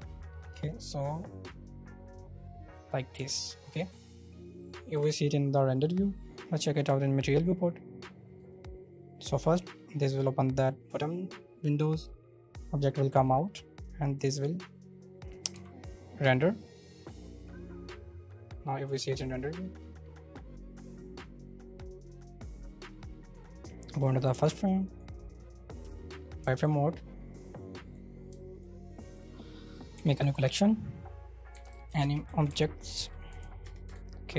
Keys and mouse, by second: 0.6-2.9 drag, 3.1 z, 5.1 KP_0, 6.2 z, 8.5-9.4 drag, 9.4-9.8 middle drag, 13.5-15.5 drag, 15.5 z, 18.5-20.3 drag, 20.3-24.0 middle drag, 24.2 shift+middle click, 24.9 click, 25.8 z, 27.9 click, 28.5 shift+click, 29.9 m, 33.9 Return.